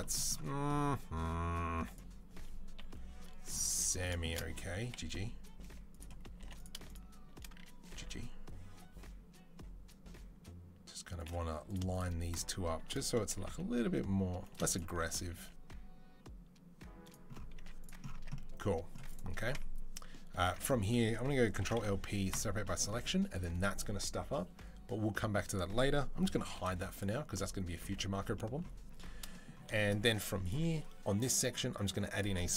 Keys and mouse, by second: 1.6 2, 2.6 KP_3, 3.5 z, 4.6 g, 6.2 1, 6.7 shift+click, 7.7 g, 11.7 shift+click, 11.8 shift+middle click, 12.1 shift+click, 12.2-21.2 shift+middle drag, 13.1 g, 15.0 g, 17.4 z, 18.0 Tab, 20.2 Tab, 21.2 ctrl+click, 21.4 ctrl+l, 21.5-30.2 middle drag, 21.6 p, 22.8 Tab, 26.4 h, 30.2-32.5 right drag.